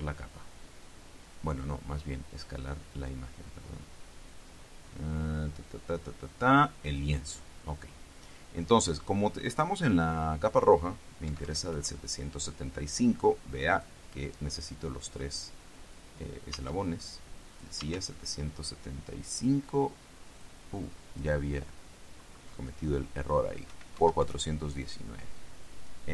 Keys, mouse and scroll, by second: 7.0 click, 11.4 KP_7, 11.9 KP_5, 13.9 click, 15.5 click, 16.7 Tab, 17.7 click, 18.0 Tab, 20.5 click, 21.0 click, 23.8 KP_4, 24.1 KP_1, 24.4 KP_9.